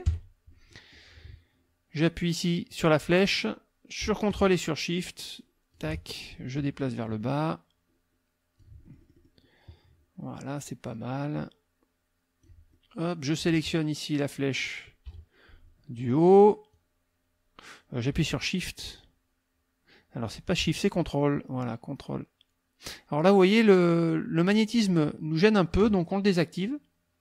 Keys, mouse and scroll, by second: 0.0 KP_Subtract, 0.7 click, 2.8-5.9 drag, 6.6-8.8 ctrl+drag, 8.9 ctrl+click, 10.7-12.6 drag, 12.7 middle click, 15.1 KP_Subtract, 16.7-25.9 drag.